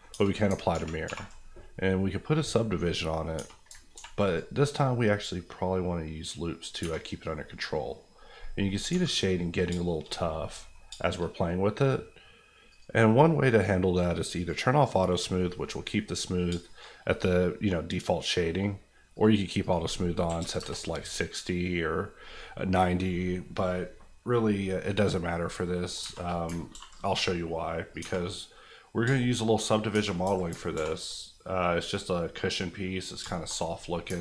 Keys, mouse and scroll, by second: 0.1 Tab, 0.7 ctrl+1, 1.0 ctrl+2, 2.8 middle click, 3.3 Tab, 3.9 ctrl+r, 4.2 click, 6.8 Tab, 7.6 middle click, 8.1-8.9 scroll up 1, 9.6-10.4 scroll up 3, 9.8 shift+middle click, 10.4 middle click, 10.8 shift+middle click, 11.2 middle click, 12.7 click, 15.3 middle click, 16.3-16.6 scroll down 2, 16.6 shift+middle click, 17.0 middle click, 17.5 middle click, 19.1 click, 20.2 KP_6, 20.4 KP_0, 20.6 KP_Enter, 25.4 middle click, 26.0 Tab, 26.2 middle click, 26.5 ctrl+middle click, 26.7 ctrl+r, 26.9 click, 28.0 Tab, 28.2 middle click, 29.0 shift+middle click, 29.3 middle click, 29.9 Tab, 30.4 Tab, 30.7 ctrl+r, 31.0 click, 33.2 shift+click, 33.3 shift+middle click, 33.5-33.8 scroll up 1, 34.1-34.2 ctrl+scroll up 1.